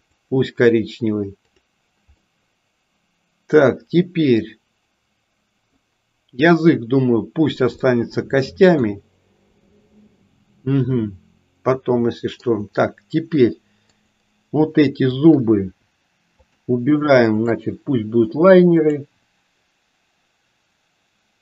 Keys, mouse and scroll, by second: 1.5 click, 2.2-5.8 middle drag, 7.9-8.9 middle drag, 9.6-12.5 middle drag, 13.9 click, 15.1 shift+click, 16.3 shift+click, 17.3 shift+click, 18.7-21.4 drag.